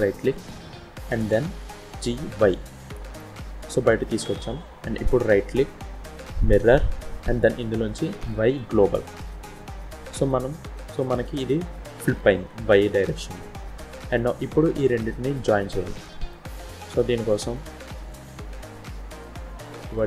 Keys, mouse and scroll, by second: 0.6-1.3 scroll up 2, 1.3-1.8 scroll down 1, 1.8 g, 4.9 right click, 9.5-9.8 scroll down 2, 9.8 middle click, 15.8 shift+middle click, 16.5 middle click, 18.0 click.